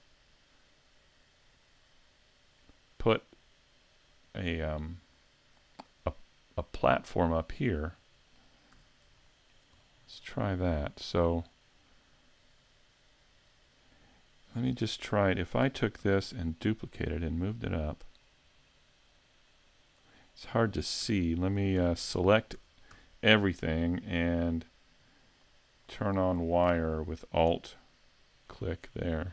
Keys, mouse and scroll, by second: 7.5 middle click, 8.8 a, 9.2 shift+middle click, 9.8 middle click, 11.3 right click, 11.9 middle click, 15.6 shift+d, 20.1 click, 20.4 middle click, 21.1 a, 21.8 a, 22.6 a, 22.9 a, 25.4 click, 25.9-28.5 scroll down 13, 28.5 alt+click.